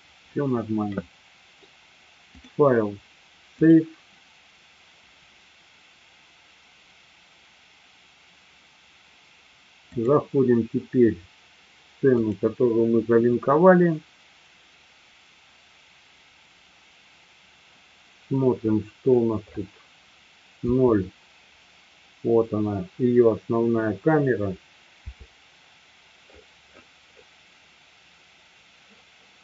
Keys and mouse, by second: 2.5-8.4 drag, 9.8-16.7 drag, 20.6 KP_0, 24.9 KP_0.